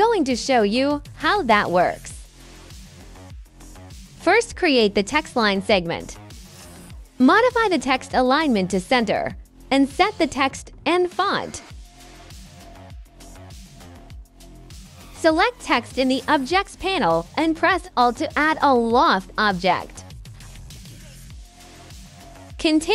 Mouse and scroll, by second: 3.1-4.4 drag, 5.2 right click, 5.5 click, 6.2 middle click, 8.5 click, 9.1 click, 10.3 click, 11.9 middle click, 15.3 click, 15.9 middle click, 16.2 right click, 17.1 click, 18.2-19.9 drag, 21.6 click, 22.2 click, 22.7 click.